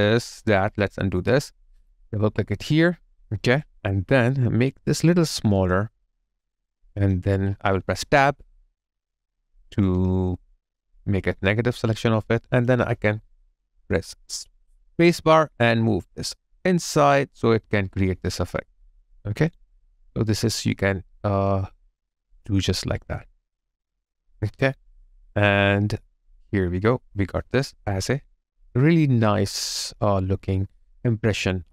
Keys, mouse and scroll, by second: 0.8 ctrl+z, 2.0 ctrl+z, 2.8 alt+click, 3.4 alt+right click, 8.0 alt+i, 9.0 Tab, 9.1 alt+click, 18.9 space, 19.0 alt+click, 19.7 alt+right click, 20.0 alt+click, 20.6 alt+middle click, 20.9 alt+click, 21.7 alt+right click, 22.1 alt+click, 28.4 alt+click.